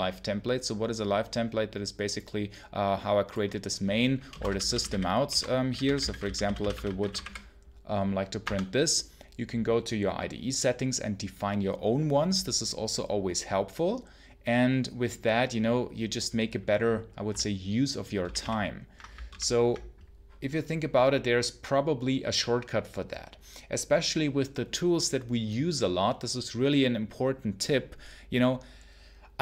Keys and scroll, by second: 4.0-7.6 typing, 8.3 Tab, 18.1 ctrl+super+l.